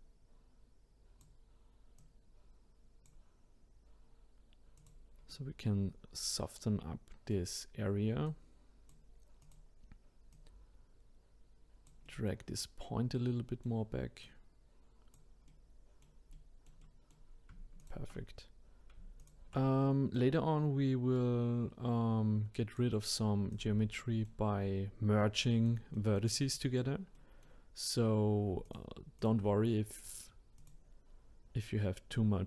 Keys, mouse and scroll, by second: 2.0-4.9 drag, 5.3-8.2 middle drag, 8.2 click, 9.4 click, 10.3 click, 12.0-14.2 middle drag, 14.2 click, 15.5-17.8 middle drag, 17.8 shift+click, 19.2 shift+click, 20.1 click, 23.5 click, 24.0 middle click, 24.9-25.4 scroll down 2, 25.4-27.9 middle drag, 27.9-28.6 scroll up 1, 28.6-30.7 shift+drag, 32.1-32.4 drag.